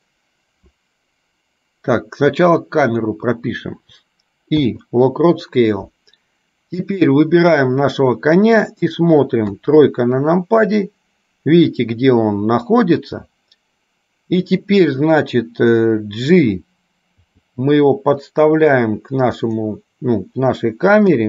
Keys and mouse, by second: 7.0 click.